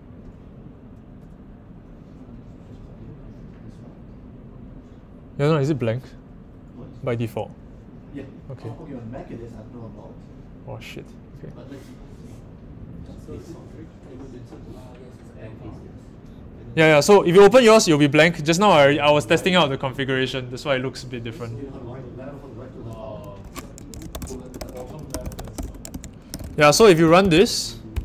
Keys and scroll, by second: 23.8-27.4 typing, 27.9 Tab.